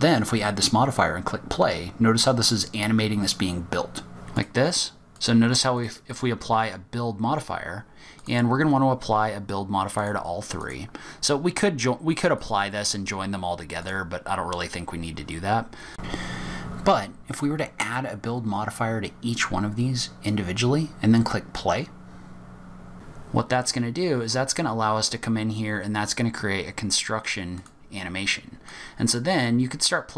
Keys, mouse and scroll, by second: 4.3 click, 5.1 click, 5.7 click, 8.1 click, 9.9 click, 10.6 click, 12.3 click, 15.9 click, 17.8 click, 18.8 click, 21.8 click, 27.6 click, 28.6 click.